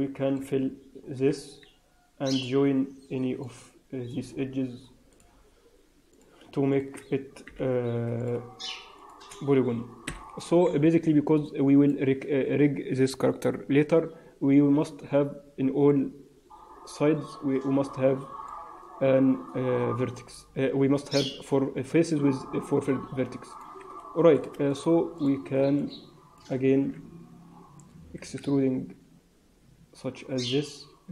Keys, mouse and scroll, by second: 1.2 f, 1.8-2.4 scroll up 2, 3.3 middle click, 5.0 click, 6.0 click, 6.6 shift+click, 7.4 j, 8.1 click, 8.9 shift+click, 10.0 j, 10.8 Tab, 10.9 scroll down 3, 11.4 middle click, 12.2 Tab, 15.8 middle click, 23.4 click, 24.2 click, 24.6 shift+click, 25.0 shift+click, 25.7 middle click, 26.6 scroll up 2, 28.0 e.